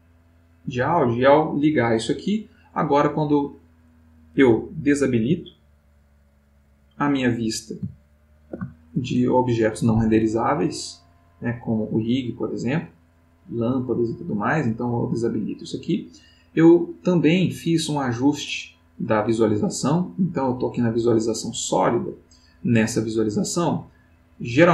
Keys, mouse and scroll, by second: 0.1 click, 5.4 click, 7.9 ctrl+middle click, 9.0 ctrl+shift+middle click, 11.2 click, 11.8 click, 12.2 click, 12.9 click, 14.3 click, 14.9 click, 21.9 click, 24.4 click.